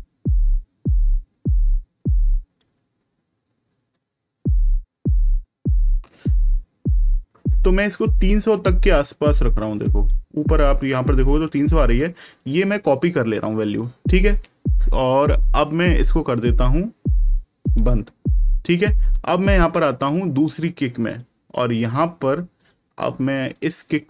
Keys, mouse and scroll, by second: 3.8 click, 12.2 right click, 13.4 click, 17.6 click, 20.9 click.